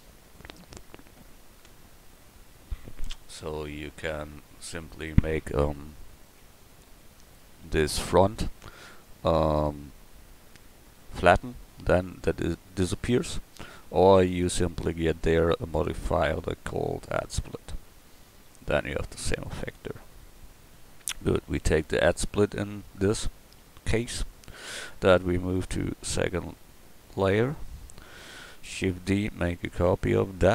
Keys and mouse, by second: 6.7 Tab, 7.6 a, 14.5 Tab, 21.5 KP_7, 22.7 KP_1, 24.6-26.0 drag, 26.1-27.4 middle drag, 26.1 m, 28.1 right click, 29.1 shift+d, 30.0 click.